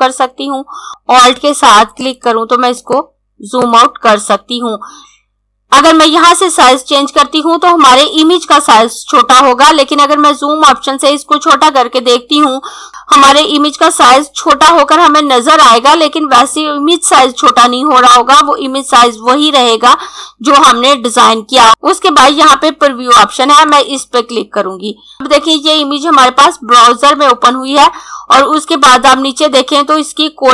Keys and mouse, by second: 1.3 alt+Num_Lock, 2.1 click, 23.7 click, 27.8 click.